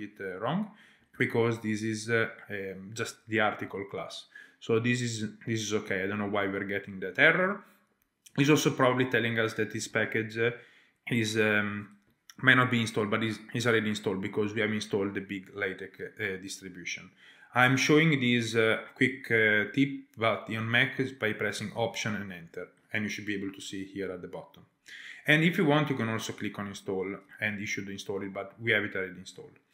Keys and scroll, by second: 1.1 alt+Return, 9.7 alt+Return, 21.7 alt+Return.